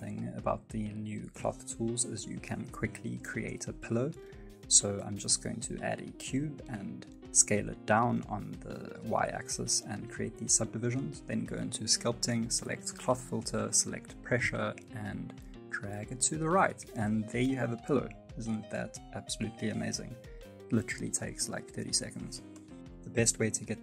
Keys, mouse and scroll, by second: 0.0 middle click, 0.2 Tab, 0.3 middle click, 0.8 F9, 0.9 middle click, 1.1 shift+middle click, 1.8 click, 3.1 Tab, 3.1-3.5 scroll down 3, 3.5 s, 4.0 scroll up 2, 4.2 middle click, 4.5 s, 6.8 shift+middle click, 6.9 scroll up 1, 7.3 g, 7.8 s, 9.0 ctrl+r, 9.1 ctrl+b, 10.4 ctrl+r, 11.7 middle click, 11.9 shift+middle click, 12.4 Tab, 12.5 middle click, 12.8 Tab, 13.3 click, 13.9 shift+middle click, 14.7 click, 17.2 middle click, 17.6 shift+middle click, 18.1 ctrl+z, 18.3 click, 21.9 middle click, 22.7 ctrl+z, 22.7-23.3 scroll down 2, 23.0 scroll up 1, 23.3 space.